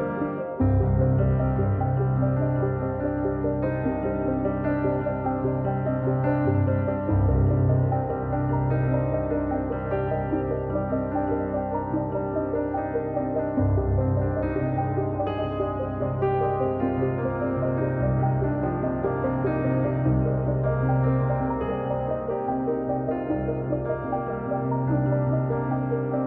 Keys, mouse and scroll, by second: 10.2-12.6 drag, 16.8-23.2 drag, 23.2-24.6 middle drag, 24.8-26.2 middle drag.